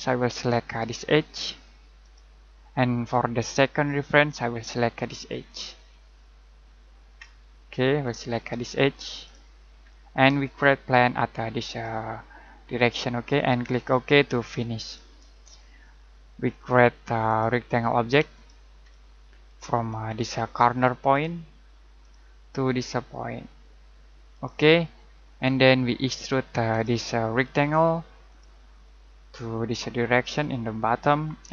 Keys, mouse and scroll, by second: 2.0 click, 7.2-7.6 scroll up 1, 9.2 click, 9.8 middle click, 11.8 middle click, 14.8 click, 18.8 middle click, 19.8-20.2 scroll up 1, 20.2-20.5 scroll down 1, 22.0 click, 24.3 click, 28.8 middle click.